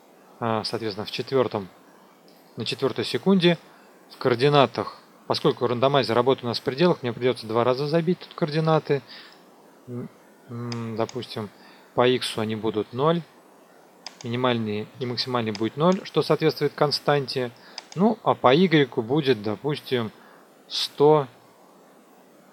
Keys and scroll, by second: 12.7 KP_0, 20.6 KP_1, 20.8 KP_0.